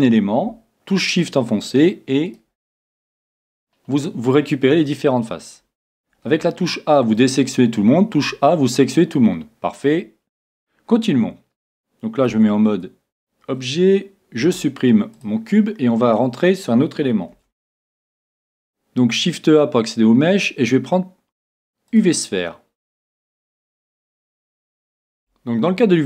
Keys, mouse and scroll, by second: 1.6-4.5 right drag, 3.3-5.1 middle drag, 6.3 a, 7.1-10.7 middle drag, 8.2 a, 12.4 Tab, 14.4 x, 17.3 s, 23.5-26.0 middle drag.